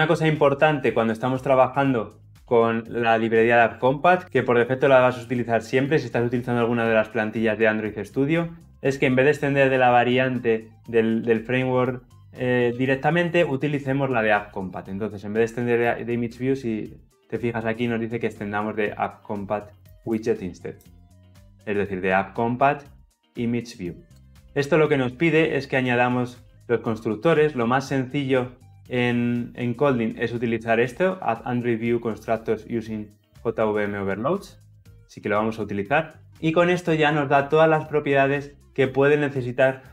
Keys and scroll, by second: 16.0 alt+Return, 27.3 alt+Return.